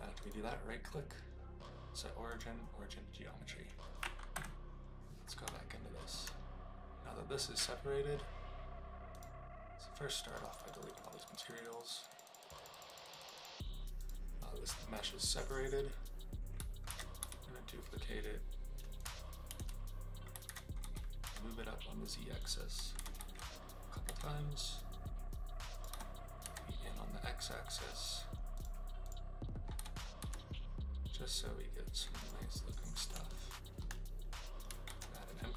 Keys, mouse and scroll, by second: 0.1-2.4 right drag, 4.3 KP_Divide, 5.5-6.1 shift+middle drag, 9.1 click, 10.2 click, 10.4 click, 13.3 click, 14.0 click, 16.8 alt+d, 17.2 r, 18.9 ctrl+click, 19.5 ctrl+z, 20.4 alt+d, 20.8 g, 21.2 z, 22.3 click, 22.9 alt+d, 23.1 g, 24.0 z, 25.7 click, 25.8 g, 26.4 x, 28.5 click, 29.7 g, 30.1 x, 32.2 click, 33.2-33.7 shift+middle drag, 34.8 shift+a.